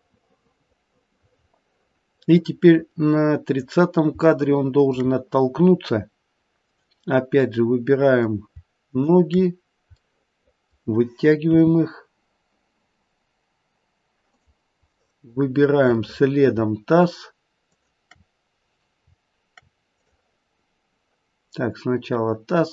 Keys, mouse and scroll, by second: 4.3 shift+middle click, 6.5 click, 7.6 middle click, 8.8 shift+click, 10.1 middle click, 11.4 g, 15.0 middle click, 16.0 middle click, 17.6 shift+click, 19.9 click.